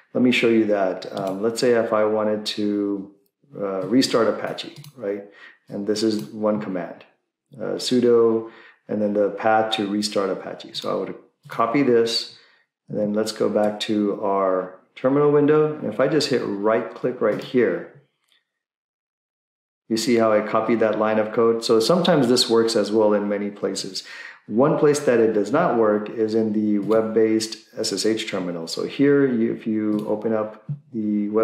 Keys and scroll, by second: 13.0 alt+Tab.